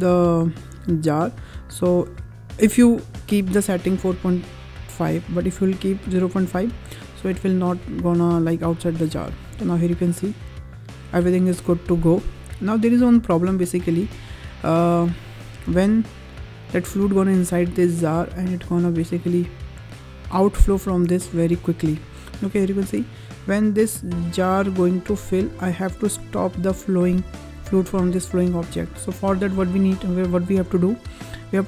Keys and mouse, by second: 8.4 click, 9.3 space, 13.9 space, 14.9 click, 15.5 space, 20.8 space, 21.7 click, 23.3-27.0 drag.